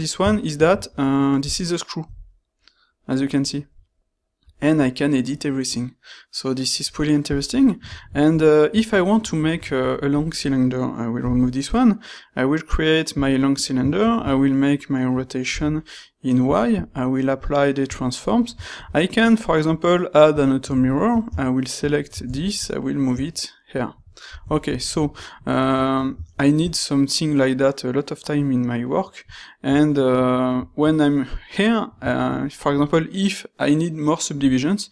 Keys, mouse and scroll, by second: 0.6 ctrl+shift+q, 11.1 x, 11.9-12.3 right drag, 12.5-13.3 right drag, 14.1 ctrl+shift+q.